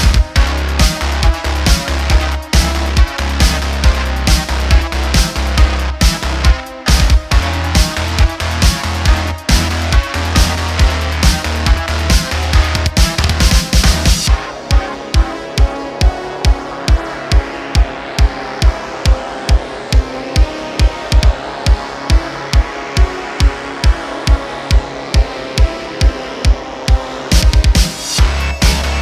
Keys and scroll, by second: 0.7 /, 1.8 Tab, 2.5 3, 5.1 x, 6.0 Tab, 6.6 ,, 7.0 super+z, 7.6 alt+h, 8.2 /, 22.1 shift+a.